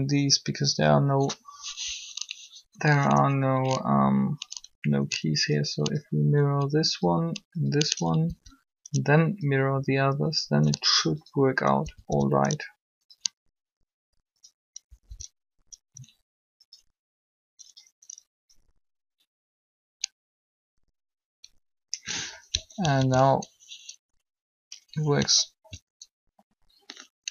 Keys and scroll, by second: 8.1 Down, 11.8 Down, 14.9 Up, 15.1 Up, 22.9 alt+a.